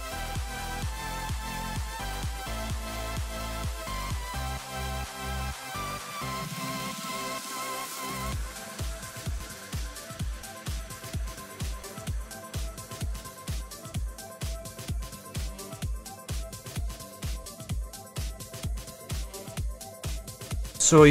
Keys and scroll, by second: 4.6 s, 5.0 s.